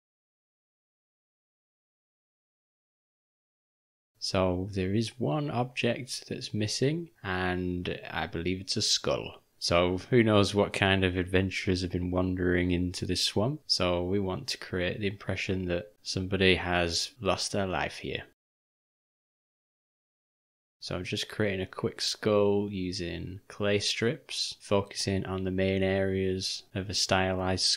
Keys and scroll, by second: 1.4 ctrl+alt+;, 2.7 ;, 4.4 v, 7.1-7.7 ], 13.6 ctrl+], 19.1 ], 23.5 [, 23.6 [, 23.6 [, 24.6 ctrl+[.